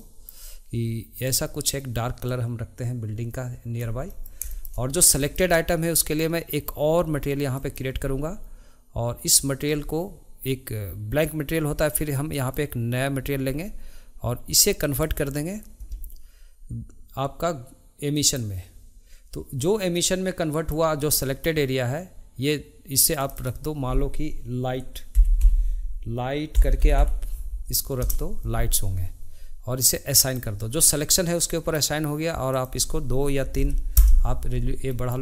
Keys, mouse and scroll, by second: 4.1-7.5 middle drag, 19.9-23.2 middle drag, 31.5-32.5 middle drag, 34.9-35.2 middle drag.